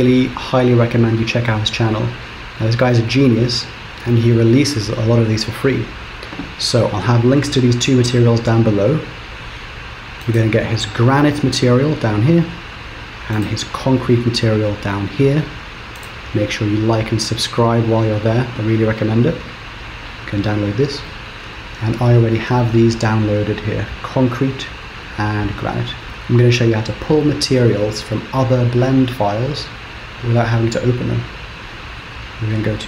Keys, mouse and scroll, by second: 26.0 click.